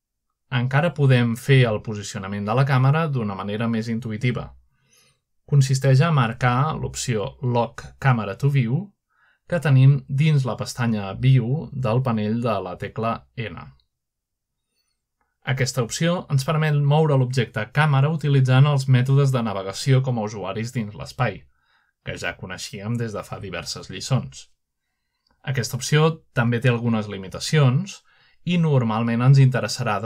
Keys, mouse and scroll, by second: 0.0 click, 0.4 g, 2.5 click, 3.6-4.5 typing, 5.5 click, 6.7 typing, 8.7 click, 14.2 click, 15.7-16.7 drag, 17.2-17.6 scroll up 1, 18.0-18.8 middle drag, 19.4 shift+middle drag, 20.1 shift+middle click, 20.5-21.3 shift+middle drag, 20.6-21.8 scroll down 1, 21.9 shift+middle click, 23.8 shift+middle click, 26.0 shift+middle click, 29.1-29.8 middle drag, 29.4-30.0 scroll up 1.